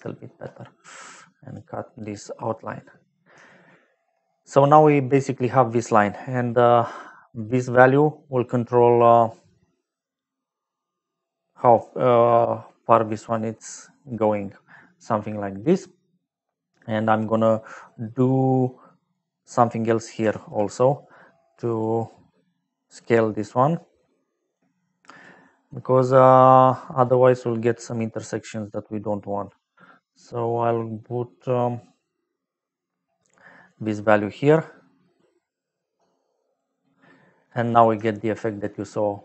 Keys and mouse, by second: 1.4 click, 2.3 click, 3.3 shift+middle click, 6.7 middle click, 7.4 middle click, 8.6 click, 17.5 middle click, 18.3 middle click, 19.1 click, 20.0 click, 20.2 shift+a, 21.6 click, 22.9 click, 24.4 click, 25.1 click, 26.9 click, 27.9 middle click, 33.6 click, 35.3 click, 38.0 shift+middle click.